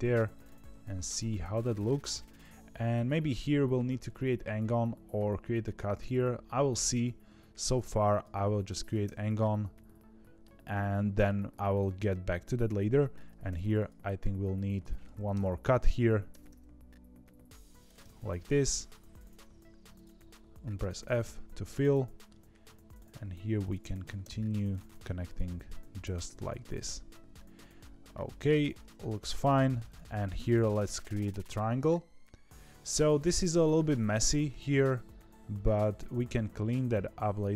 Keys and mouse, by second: 1.2 middle click, 9.4 middle click, 13.4 ctrl+r, 15.3 KP_3, 16.2 g, 17.9 middle click, 21.6 middle click, 22.8 click, 24.6 click, 25.9 f, 26.3-28.4 middle drag, 29.8 click, 31.3-36.7 middle drag, 36.9 2.